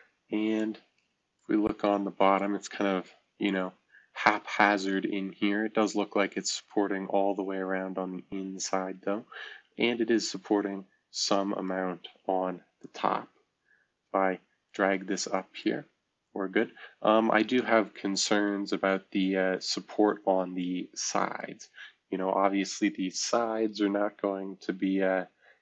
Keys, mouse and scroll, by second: 0.6-1.4 right drag, 2.3-11.7 right drag, 12.8-14.6 drag, 14.6-16.5 middle drag, 16.5-18.5 drag, 18.5-22.9 right drag, 18.5-19.9 scroll down 1, 25.3 F2.